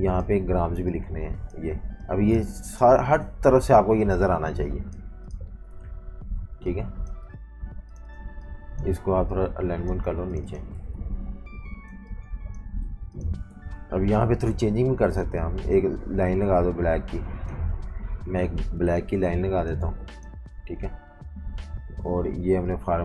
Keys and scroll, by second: 6.4-7.8 typing, 10.9 super+-, 11.1 super+-, 12.0-13.0 typing, 14.2 m, 17.9-20.0 typing.